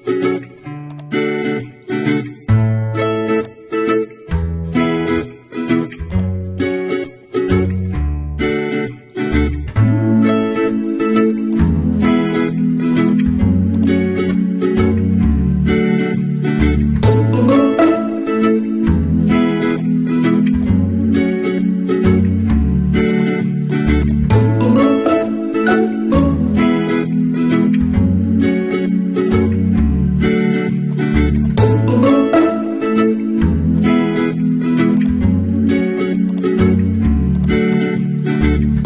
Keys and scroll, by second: 1.1 alt+BackSpace, 1.8 ctrl+d, 6.9 alt+Left, 7.1 Up, 7.8 Left, 13.8 alt+BackSpace, 14.6 ctrl+d, 15.5 ctrl+t, 17.4 Return, 17.7 Right, 21.3 ctrl+h, 25.4 ctrl+t, 27.6 Return, 27.9 Right.